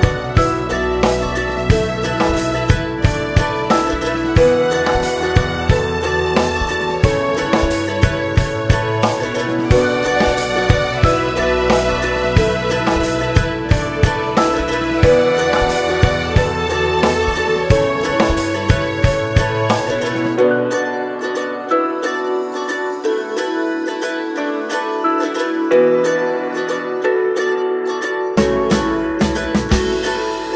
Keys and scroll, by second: 0.9 ctrl+e, 2.5 ctrl+e, 4.0 ctrl+e, 15.3 ctrl+e, 18.4 ctrl+e, 25.7 ctrl+e, 27.9 ctrl+r, 28.2 Escape, 28.9 ctrl+e, 30.2 ctrl+e.